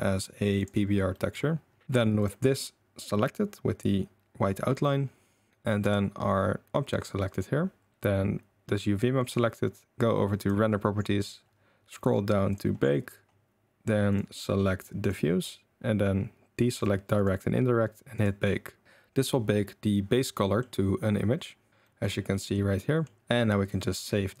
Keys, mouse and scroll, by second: 1.2 click, 2.2 click, 5.8 click, 10.4 click, 14.1-15.1 drag, 16.7 click, 17.1 click, 20.4 middle drag, 21.9 middle drag, 22.3 middle drag, 22.9 middle drag, 23.6-24.4 drag.